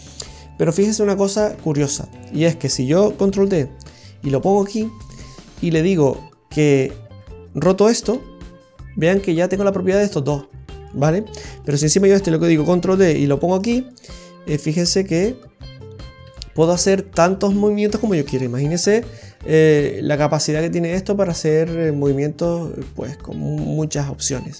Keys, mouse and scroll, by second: 2.3 right click, 3.3 shift+d, 7.1 right click, 8.0 r, 11.8 right click, 12.8 shift+d, 14.5 right click, 14.9 right click, 16.2 r.